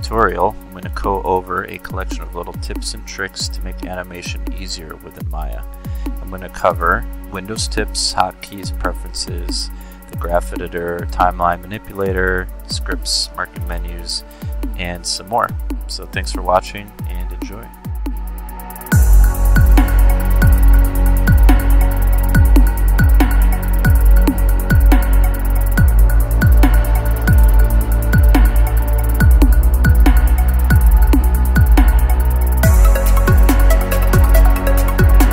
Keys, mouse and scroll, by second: 0.0 click, 1.1 click, 1.7 alt+middle click, 1.8 alt+scroll up 2, 2.4 scroll up 2, 2.5 click, 3.4 click, 3.8 click, 4.1 click, 4.4 click, 4.6 middle click, 4.7 Tab, 5.0 alt+right click, 5.1 middle click, 5.3 middle click, 5.5 click, 5.6 middle click, 6.0 middle click, 6.5 middle click, 7.1-19.3 drag, 19.5 click, 19.8 click, 19.8 scroll up 2, 20.0 click, 20.3 click, 20.5 scroll up 2, 21.4 click, 21.9 alt+middle click, 22.2 space, 22.3 click, 23.2 s, 24.5 `, 24.9 alt+click, 25.5 alt+middle click, 25.8 click, 26.2 click, 27.0-27.5 scroll up 2, 27.5 click, 28.8 space, 28.8-35.3 drag.